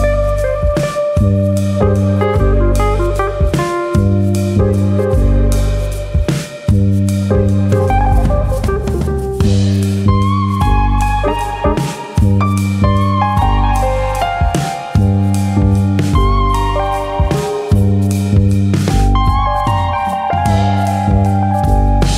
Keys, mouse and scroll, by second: 0.5 shift+e, 2.9 click, 4.2 click, 5.7 click, 8.6 click, 12.2 middle click, 12.7 scroll up 1, 12.9 middle click, 14.1 click, 14.5 middle click, 15.4 click, 18.8 click, 19.5 click, 22.0 click.